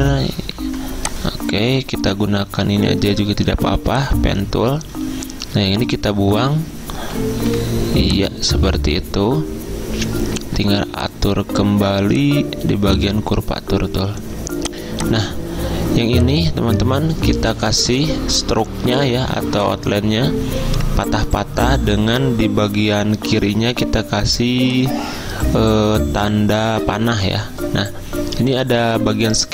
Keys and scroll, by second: 0.0 v, 0.8 p, 6.5 a, 7.5 -.